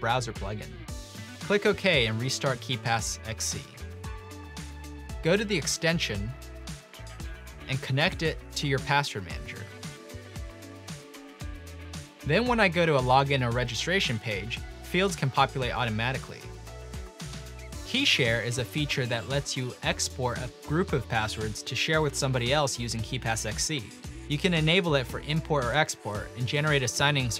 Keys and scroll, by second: 1.1-1.8 typing, 6.0-8.4 typing, 9.6 typing, 15.5 typing, 17.5 typing.